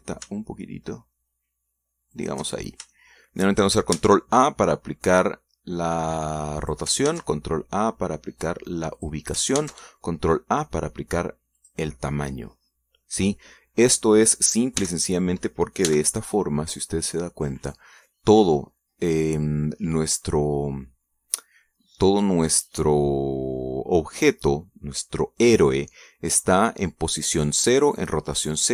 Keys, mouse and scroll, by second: 0.6 g, 1.0 z, 3.4 shift+click, 3.8 shift+scroll down 2, 4.1 shift+middle click, 5.2 ctrl+a, 7.8 click, 8.3 ctrl+a, 10.2 click, 10.8 ctrl+a, 12.8 click, 14.3 scroll down 2, 16.0 t, 17.1 n.